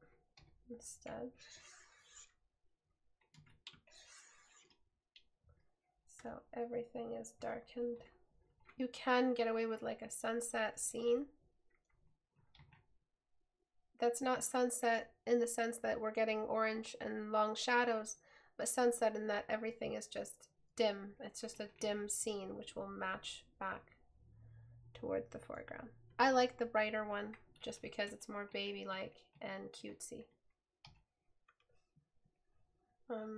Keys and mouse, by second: 6.3 right click, 11.2 right click, 31.0 right click.